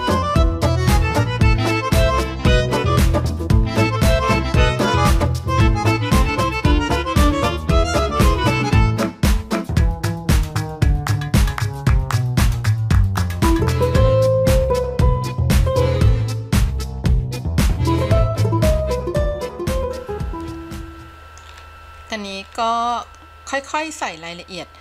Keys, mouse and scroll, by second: 0.8 middle click, 1.5 click, 1.9 scroll down 4, 2.0 middle click, 2.5 scroll up 1, 2.9 click, 3.4 middle click, 3.8 click, 4.0 scroll down 6, 4.3 middle click, 4.7 scroll up 4, 5.4 click, 5.7 click, 6.1-6.7 drag, 6.9 click, 7.3 scroll down 4, 7.5-8.3 scroll up 7, 7.8 middle click, 8.3 middle click, 9.0 click, 9.3 click, 9.5 click, 9.8 click, 10.3 click, 10.6 middle click, 11.8-13.2 drag, 13.4 click, 13.5 click, 13.7 click, 13.9 click, 14.1 middle click, 14.4 click, 14.7 click, 15.0 middle click, 15.3 click, 15.6 middle click, 15.9-16.2 scroll down 4, 16.2 middle click, 16.8 click, 18.2 f, 18.4 click, 18.7 middle click, 19.1 click, 19.4 middle click, 19.9 click, 20.9 middle click, 21.7-22.2 scroll up 2, 22.2-22.6 scroll down 3, 22.6-23.2 scroll up 3, 23.3 middle click, 24.3-24.8 scroll up 1.